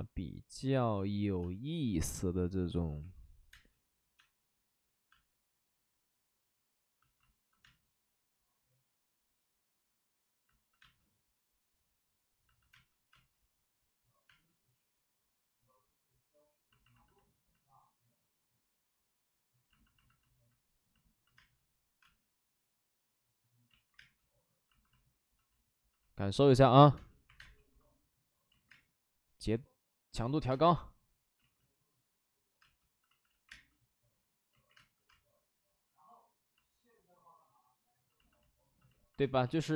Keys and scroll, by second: 1.4 space, 2.8-5.1 typing, 7.6 space, 12.7 space, 13.1 space, 14.2 space, 21.3 space, 21.9 space, 23.6 ctrl+z, 23.9 space, 26.9 space, 27.2 1, 28.5 ctrl+z, 28.6 space, 29.1 space, 29.3 space, 30.2 ctrl+z, 30.4 space, 31.3 ctrl+z, 32.5 space, 33.0 ctrl+z, 33.4 space, 34.5 ctrl+z, 34.7 space, 35.0 space, 35.5 space, 35.6 space, 39.4 ctrl+z, 39.5 ctrl+z.